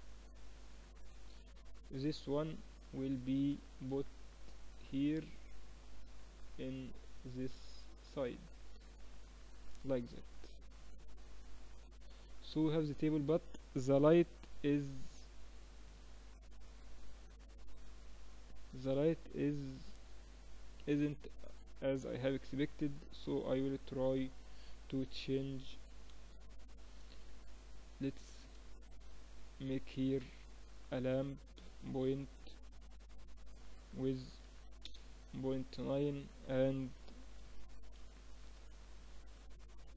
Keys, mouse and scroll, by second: 0.6 KP_3, 3.9-5.7 middle drag, 9.3 z, 9.5-14.6 middle drag, 14.1 shift+z, 17.0-19.3 drag, 24.0-25.8 drag, 25.5 KP_3, 26.1-30.3 middle drag, 29.3 shift+a, 30.3 click, 32.7-34.5 drag, 35.6-39.9 drag, 37.2 5.